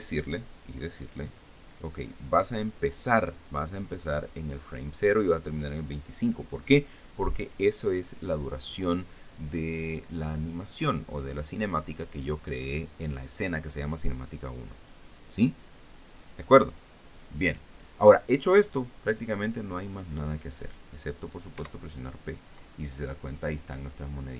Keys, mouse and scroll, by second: 22.2 p.